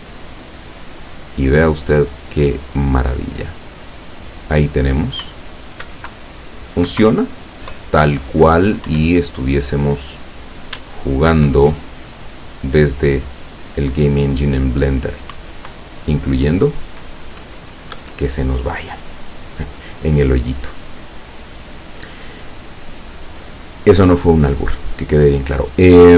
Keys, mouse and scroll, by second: 5.5 Up, 6.3 Down, 7.1 Up, 8.1 Down, 9.0 Up, 10.8 s, 15.4 Up, 18.0 Escape, 20.6 click.